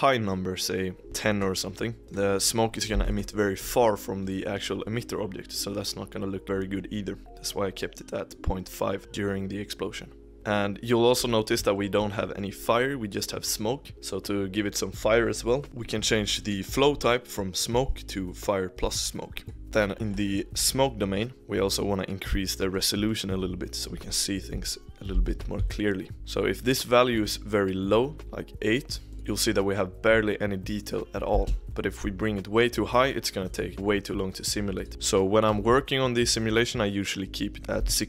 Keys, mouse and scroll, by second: 0.3 click, 1.0 ctrl+z, 2.0-3.1 drag, 7.8-10.3 drag, 11.1 click, 11.7 shift+middle click, 12.1 scroll up 1, 12.1-14.9 middle drag, 17.6-19.6 drag, 19.6 scroll up 1, 19.7-21.4 shift+middle drag, 22.7-25.9 drag, 26.6-28.2 drag, 29.1 click, 29.1-31.3 middle drag, 31.3 space, 31.6 click, 33.7-34.7 middle drag, 34.7-37.3 drag.